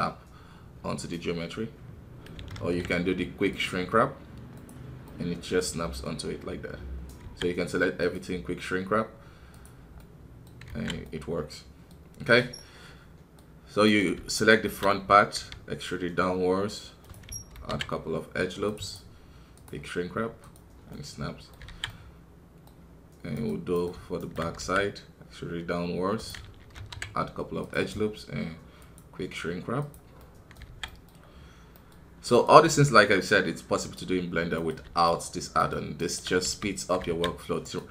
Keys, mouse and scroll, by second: 3.5-5.0 drag, 5.0-7.2 middle drag, 7.2 a, 8.0-9.9 drag, 9.9 middle click, 10.6 alt+a, 11.0-12.2 middle drag, 12.2-12.5 scroll up 1, 12.5-15.1 middle drag, 15.1 scroll down 1, 15.3 e, 19.5-20.9 drag, 20.9 middle click, 21.6 alt+a, 21.8-23.7 middle drag, 23.7 right click, 24.6 e, 28.8-30.6 drag, 30.6 alt+a, 30.8-32.3 middle drag, 32.3 right click, 32.6 f, 34.5-36.4 right drag, 36.4 f, 37.6 right click.